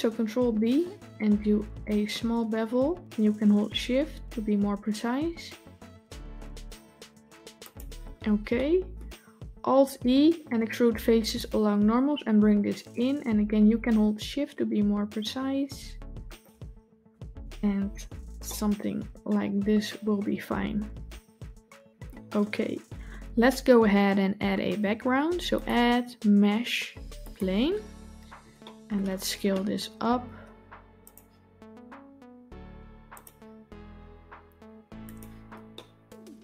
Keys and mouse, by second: 0.4 ctrl+b, 8.4-8.8 middle drag, 9.6 alt+e, 16.8 Tab, 18.3-21.9 middle drag, 25.4-27.2 drag, 28.5 middle drag, 29.9 s, 31.5 s, 33.4 s, 35.6-36.4 middle drag.